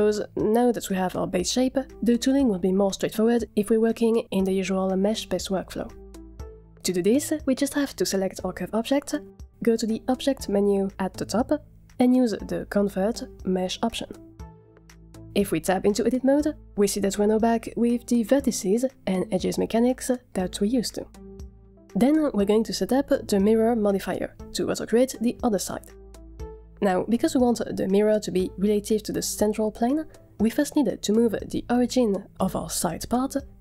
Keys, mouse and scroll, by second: 10.3-14.6 drag, 15.5 Tab, 21.5 Tab, 27.1-27.8 shift+middle drag.